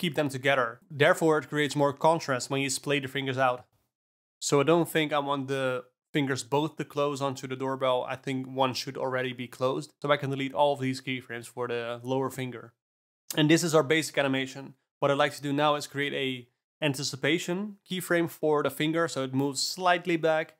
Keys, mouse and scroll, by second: 1.3 i, 4.0 Down, 4.2-6.3 middle drag, 6.3 shift+click, 6.8 shift+click, 7.3 shift+click, 8.4 click, 9.4 click, 9.9 alt+a, 10.1 drag, 10.9 x, 12.5 space, 15.4 space, 15.6 r, 16.6 shift+d, 17.8 r.